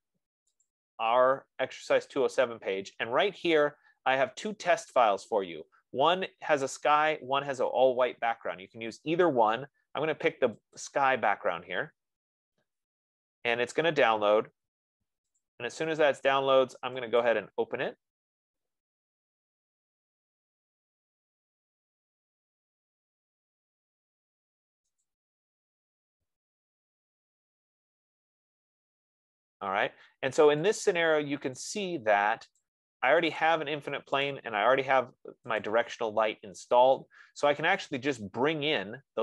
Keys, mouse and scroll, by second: 1.3 click, 2.8-3.6 scroll, 11.2 click, 15.7 click, 17.7 click, 25.5 click, 27.6 click, 31.3 click, 32.2 click, 33.0 click, 33.7 click, 34.5 click, 36.0 click, 38.0 F15, 38.2 right click, 38.7-39.2 scroll up 3.